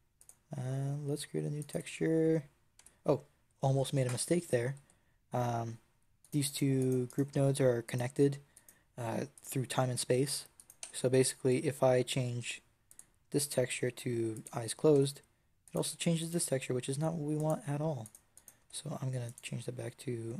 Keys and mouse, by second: 1.5 click, 1.6 Tab, 2.7 Tab, 6.1 click, 6.2 right click, 10.5 click, 10.7 Tab, 12.8-13.9 middle drag, 14.8 Tab, 17.2 middle click, 18.3 middle click, 18.5 Tab.